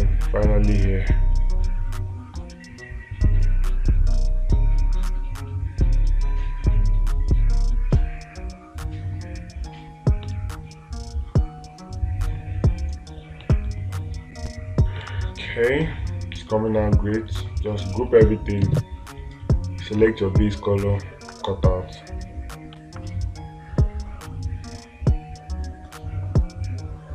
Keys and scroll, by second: 10.8 space, 15.5 space.